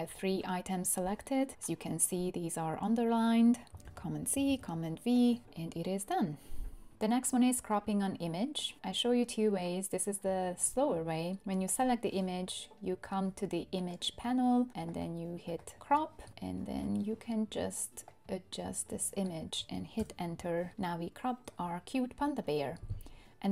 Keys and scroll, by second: 3.8 super+c, 4.5 super+v, 20.0 Return.